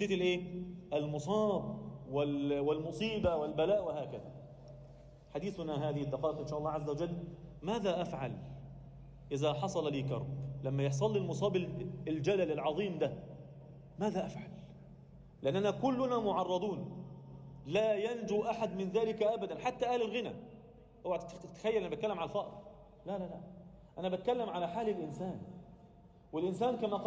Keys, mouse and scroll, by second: 0.2 click, 0.8 shift+click, 1.4 click, 2.3 g, 3.9 click, 4.7 g, 6.2 Tab, 6.5 scroll down 1, 6.6 middle click, 7.5 Tab, 7.5-8.0 scroll up 1, 8.0 a, 9.1 Tab, 9.3 Tab, 10.9 e, 12.0 e, 15.1 e, 17.4 Tab, 17.9 alt+middle click, 18.6-20.4 scroll up 1, 21.9-22.4 scroll up 1, 22.4 Tab, 23.5 ctrl+KP_Add, 24.5 g, 26.4 Tab.